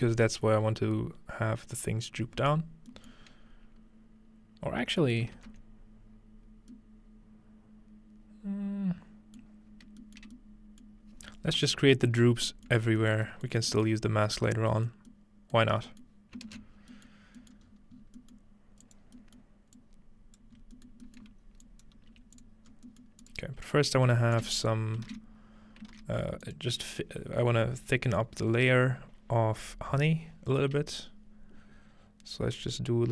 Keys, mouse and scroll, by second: 2.9-4.8 middle drag, 3.5-4.5 scroll up 2, 4.5-5.4 scroll up 1, 5.0-6.7 ctrl+middle drag, 9.7-11.2 scroll down 1, 11.2-12.7 scroll up 1, 12.9 shift+middle click, 13.7 shift+middle click, 14.0 middle click, 14.0-14.9 scroll up 1, 14.9 middle click, 14.9-15.9 scroll up 1, 16.2-17.6 middle drag, 16.5 ctrl+space, 16.7-17.7 scroll down 1, 17.7-18.6 scroll up 2, 20.5 click, 20.6 scroll up 2, 21.3 scroll down 2, 21.7 click, 22.1 g, 22.7 scroll up 1, 23.2 click, 23.7 click, 23.8-24.6 scroll up 1, 24.4-25.9 typing, 24.5 click, 24.7-26.1 drag, 26.5 click.